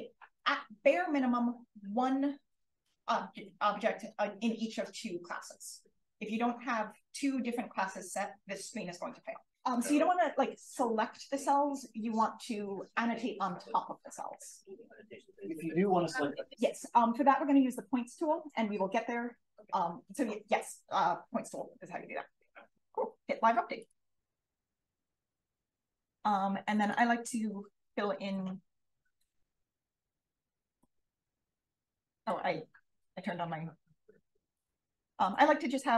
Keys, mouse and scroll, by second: 23.7 click, 26.9 click, 30.7 d, 34.5 click.